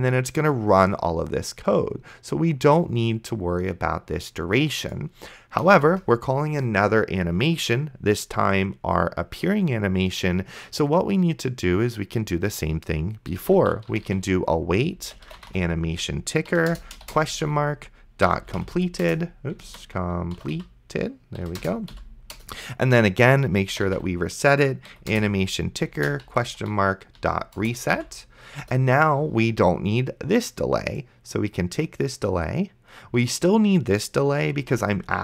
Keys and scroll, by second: 6.0 Return, 13.3-16.2 typing, 16.5 Down, 16.7 Return, 17.4-21.9 typing, 19.9 ctrl+z, 21.4 Down, 21.6 Return, 22.4 Return, 23.3-24.5 typing, 24.9 Down, 25.1 Return, 26.0-27.9 typing, 27.6 Return, 28.6 Return, 34.8 ctrl+x.